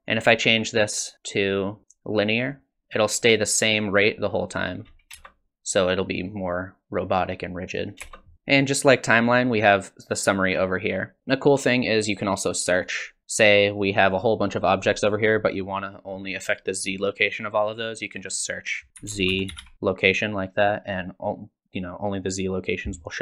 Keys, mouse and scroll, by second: 1.4 click, 3.2 click, 5.2 space, 8.0 space, 10.4 click, 12.8 click, 18.2 click.